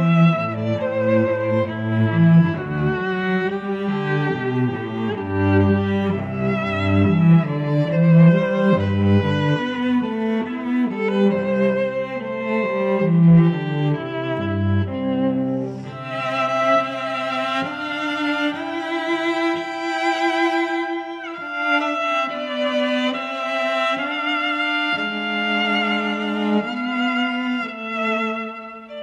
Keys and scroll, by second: 13.2 shift+a.